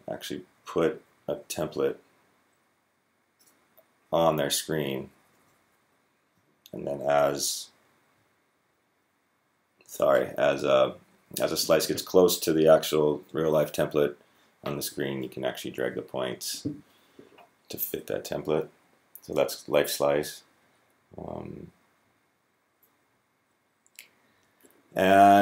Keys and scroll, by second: 0.9 Down, 1.1 Down, 1.3 Down, 4.7 Up, 4.8 Up, 4.9 Up, 5.1 Up, 5.3 Up, 5.4 Up.